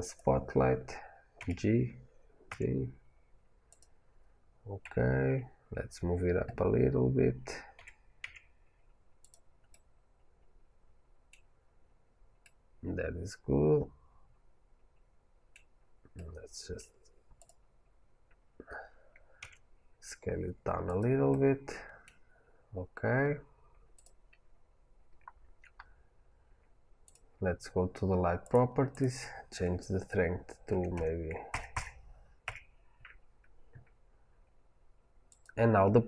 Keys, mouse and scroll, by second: 1.3 g, 3.7 click, 4.7 KP_1, 6.6-7.6 scroll down 1, 7.6 g, 9.1 click, 9.6-17.2 middle drag, 15.6-16.0 scroll down 2, 17.2 click, 19.3 s, 20.9 click, 21.2-23.8 middle drag, 22.3-23.5 scroll up 2, 23.5-23.8 scroll up 1, 23.8 drag, 25.7-26.3 scroll up 1, 26.3-26.6 scroll down 1, 26.9 click, 28.3 click, 28.8-35.3 drag, 31.6 KP_0, 32.4 KP_Enter.